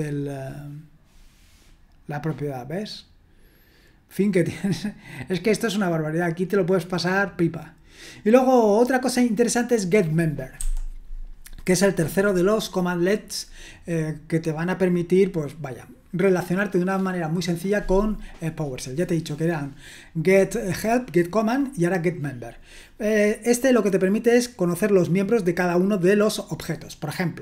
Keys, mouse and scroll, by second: 3.2-4.6 scroll up 1, 4.8-6.7 scroll down 2, 6.7-7.4 scroll down 1, 7.4-8.5 scroll down 1, 9.6-10.6 drag, 10.6 typing.